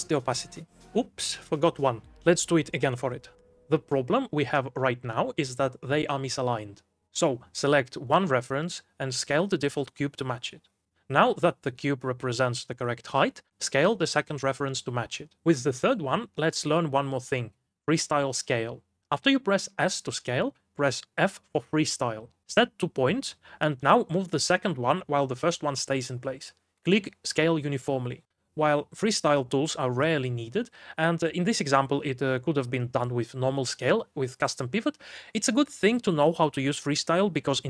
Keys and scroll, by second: 2.8 m, 6.5-7.4 typing, 8.5-11.9 typing, 14.3-16.8 typing, 19.1 4, 19.4 g, 20.8 s, 22.7 f, 36.6 g.